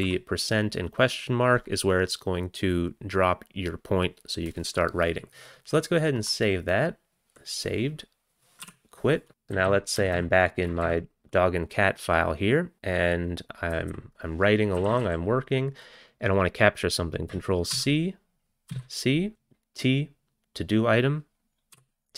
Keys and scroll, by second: 8.7-9.5 typing, 9.5 Return, 9.5 Down, 9.7 Down, 10.0 Down, 10.2 Down, 10.7 Up, 13.8 Down, 14.0 Down, 14.5-15.5 typing, 17.7 ctrl+c, 18.7 c, 21.8 t.